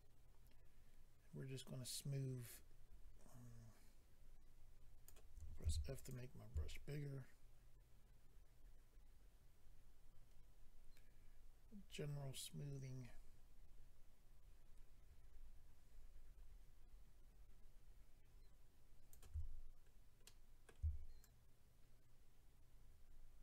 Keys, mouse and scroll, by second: 5.6 f, 5.9 click, 6.7 shift+click, 19.9 scroll down 1, 20.2 middle click, 21.2 shift+click.